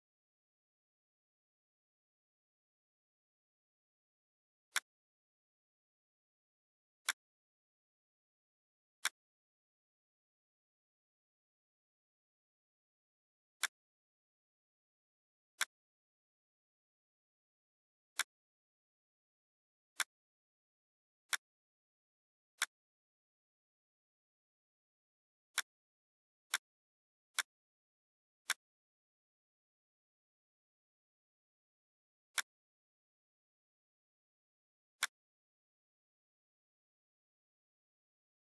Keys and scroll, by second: 37.0 Left.